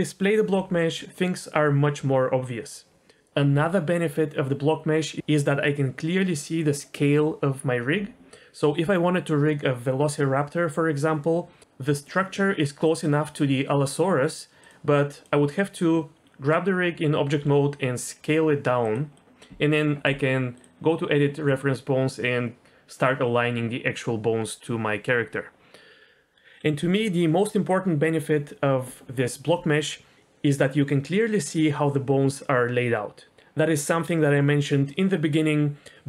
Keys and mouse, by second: 14.6 click, 15.2 click, 17.4 s, 18.8 click, 19.2 middle click, 21.5 middle click.